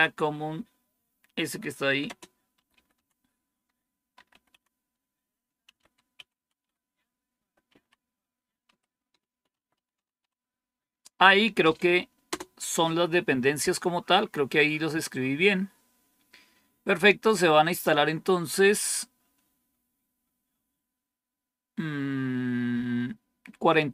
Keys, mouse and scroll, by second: 2.2-10.6 typing, 12.1 Return.